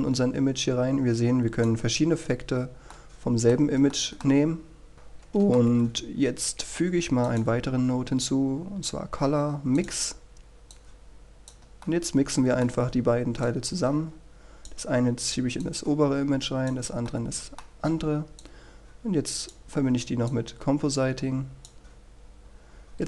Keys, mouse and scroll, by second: 3.6-4.1 scroll down 1, 4.1 middle click, 5.2 click, 6.1-7.2 middle drag, 8.4 click, 13.0 middle click, 14.6-18.2 drag, 19.6-23.0 drag.